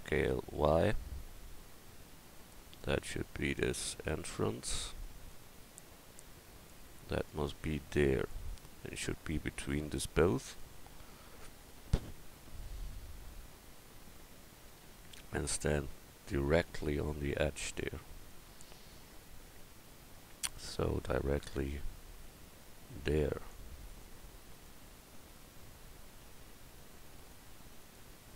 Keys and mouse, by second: 9.8 middle click, 27.8-28.3 drag.